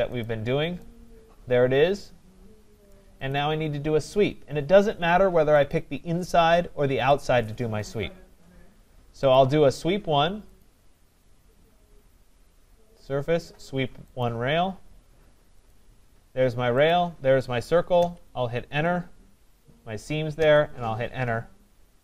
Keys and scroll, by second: 17.9 Return.